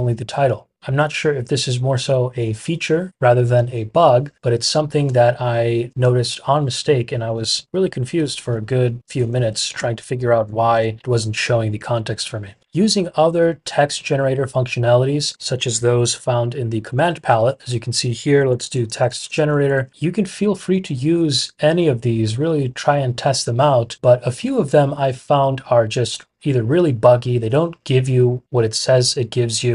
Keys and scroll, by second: 4.6 Escape, 6.9-7.8 typing, 9.4-10.9 typing, 16.7 super+p, 18.2-20.2 typing.